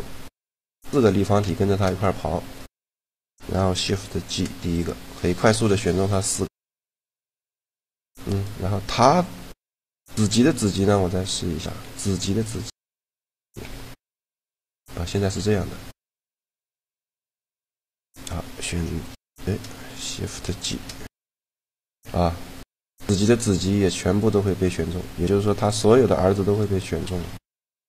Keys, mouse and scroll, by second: 1.8-3.0 drag, 1.8 g, 3.8 shift+g, 5.4-6.9 drag, 8.1-9.8 right drag, 11.0-14.0 right drag, 11.4 g, 13.4 ctrl+p, 15.0 right click, 15.1 g, 15.7 right click, 16.2-19.4 drag, 16.4 g, 18.9 shift+l, 20.5 shift+g, 25.3-26.5 middle drag, 25.7 g, 26.5 right click, 26.9 g.